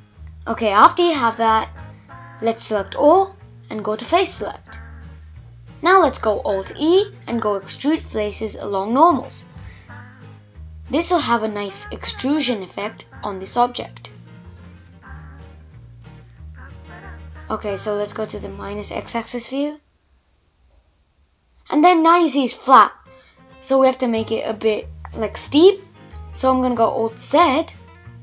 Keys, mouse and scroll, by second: 1.2 3, 3.0-4.2 middle drag, 4.2 alt+e, 8.2-10.4 middle drag, 10.4-10.8 scroll up 3, 10.8-12.2 middle drag, 12.2 scroll down 2, 12.3 middle click, 13.1 scroll down 2, 16.1 click, 20.4-23.6 drag, 23.9 alt+z, 24.4 alt+z, 25.0 alt+z, 25.5 alt+z, 26.4 alt+z, 27.1 alt+z.